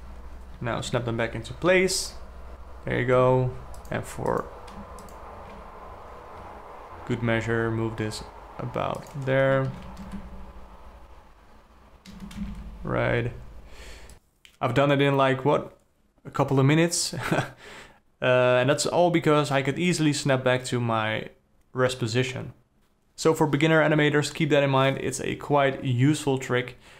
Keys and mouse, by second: 0.0 shift+Up, 1.4 alt+g, 2.2 i, 3.8 alt+a, 4.3 click, 4.8 click, 5.6 shift+click, 7.8 g, 10.3 shift+Left, 10.6 space, 12.7 space, 13.1 shift+Left.